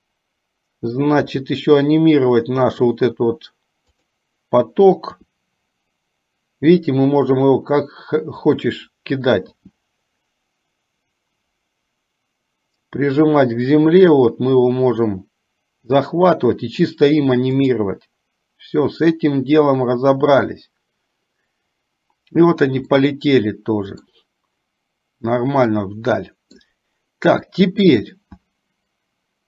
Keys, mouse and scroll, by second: 1.5 g, 5.4 r, 9.8-12.8 right drag, 9.8 g, 26.0 middle click, 28.3 click.